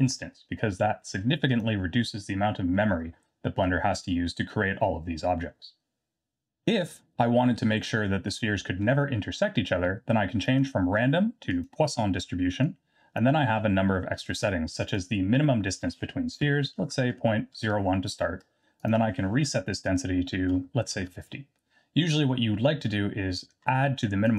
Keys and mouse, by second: 10.6-11.7 drag, 12.7 click, 14.0 middle click, 14.9-18.3 drag, 18.9-21.6 drag.